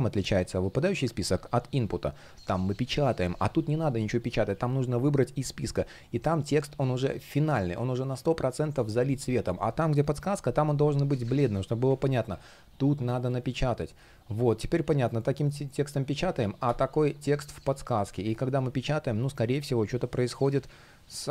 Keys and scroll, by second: 17.9 shift+Return.